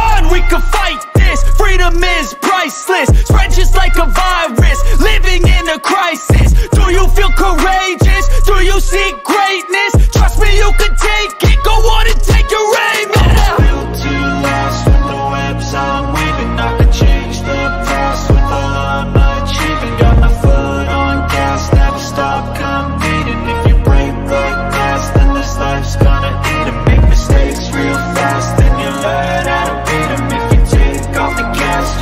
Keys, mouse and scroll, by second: 1.0 shift+click, 2.7 click, 3.3 g, 3.9 click, 4.3 ctrl+d, 5.2 ctrl+-, 7.1-7.6 drag, 8.1 click, 9.3 click, 10.2 b, 11.3 click, 11.7 ctrl+z, 12.1 click, 12.5 ctrl+z, 12.9 click, 13.5 ctrl+z, 14.3 click, 14.8 ctrl+z, 15.3 click, 15.7 ctrl+z, 16.4 click, 16.9 ctrl+z, 17.6-19.0 drag, 19.5 e, 20.0 click, 21.2 click, 21.6 click, 22.1 click, 22.6 click, 23.2 click, 23.9 ctrl+=, 25.2 ctrl+z, 25.6 ctrl+z, 25.9 ctrl+z, 26.4 ctrl+z, 26.8 ctrl+z, 27.2 ctrl+z, 27.6 ctrl+z, 28.2 ctrl+-, 28.7 ctrl+-, 31.4 click.